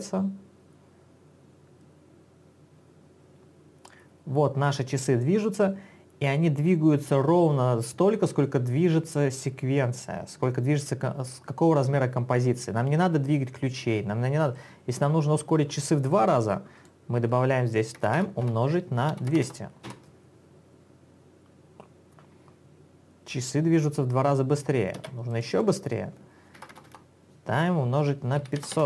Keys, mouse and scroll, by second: 16.5 click, 16.9 double click, 18.1-20.0 typing, 25.3 space, 25.5 click, 25.7 double click, 26.9 BackSpace, 28.3-28.8 typing.